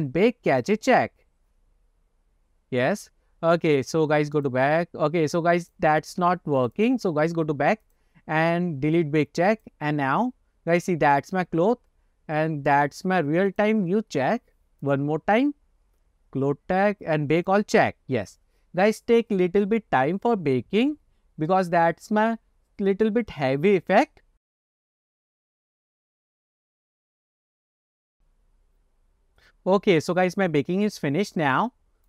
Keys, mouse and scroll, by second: 0.7 click, 2.1 click, 4.5 click, 5.7 click, 6.7 click, 6.9 click, 7.9 click, 9.6 click, 13.8 click, 15.0 click, 15.8-17.1 scroll down 6, 17.5-31.3 drag, 31.6 click.